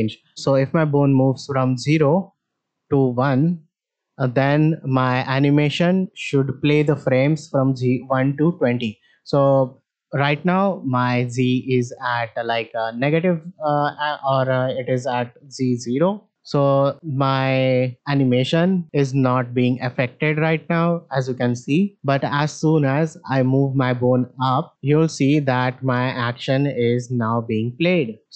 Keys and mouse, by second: 2.4 click, 11.0 click, 11.8-13.2 drag, 14.1 middle drag, 14.9 shift+middle drag, 15.9 click, 16.3 shift+middle click, 17.9 click, 19.6 shift+middle drag, 21.3 shift+middle click, 22.3 click, 23.2-28.3 drag.